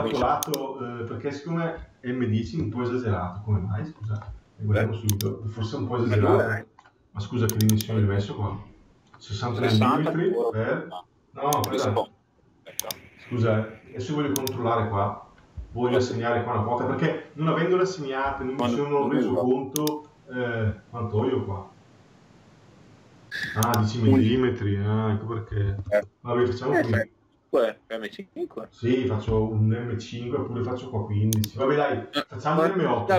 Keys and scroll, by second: 2.3 Delete, 25.6 Return.